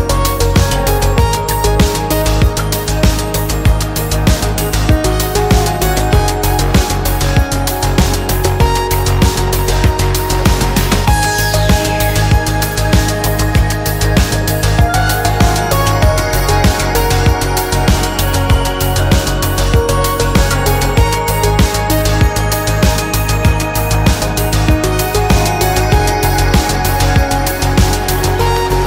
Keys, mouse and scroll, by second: 0.1 middle click, 0.8 middle click, 1.4 click, 1.9 click, 2.6 click, 5.4 click, 6.8 click, 8.9 click, 10.5 click, 12.0 click, 13.9 click, 15.6 click, 17.3 click, 18.5 click, 19.4 KP_Subtract, 21.0 click, 22.1 click, 24.7 click, 25.3 click, 25.8 middle click, 25.8-26.4 scroll up 2, 26.9 KP_Subtract, 28.1-28.8 drag.